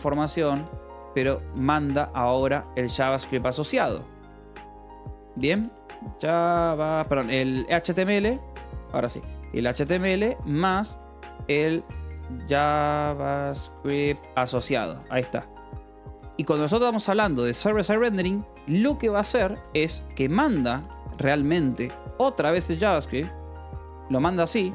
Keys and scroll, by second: 0.0-5.2 typing, 6.8 Escape, 7.2-11.3 typing, 12.4-16.1 typing, 15.6 Escape, 18.0 h, 18.3 l, 19.3 a, 19.8 space, 20.0 a, 20.5 BackSpace, 21.6-24.5 typing.